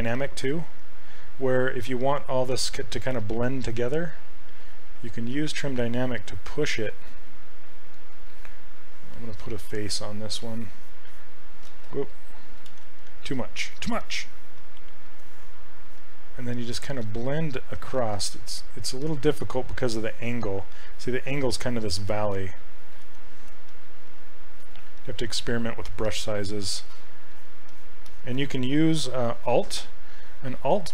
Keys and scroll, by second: 0.2 s, 11.8 ctrl+z, 12.8 ctrl+z, 18.1 ctrl+z, 23.0 ctrl+z, 24.1 s.